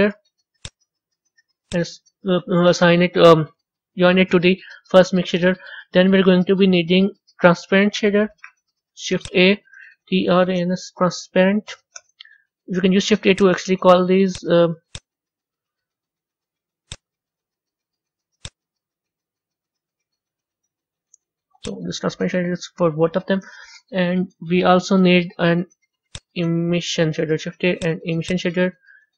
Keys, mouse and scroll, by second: 2.8 click, 14.2 click, 14.8 click, 16.8-21.3 drag, 21.3 middle click, 21.5-29.1 drag.